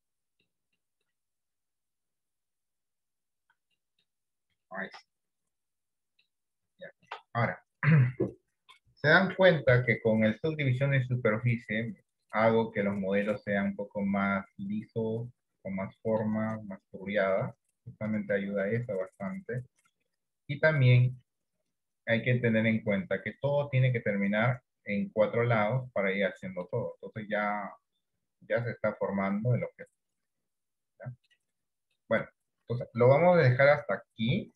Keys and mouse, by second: 0.1 middle click, 0.9 shift+middle click, 2.2-3.3 drag, 4.0 middle click, 4.9 shift+middle click, 5.2-6.3 middle drag, 6.9 shift+middle click, 13.3-16.4 middle drag, 16.7 middle click, 18.5-21.1 middle drag, 22.3 middle click, 23.7-26.8 middle drag, 27.7-31.3 middle drag, 32.0 middle click, 33.4 middle click, 34.4 KP_1.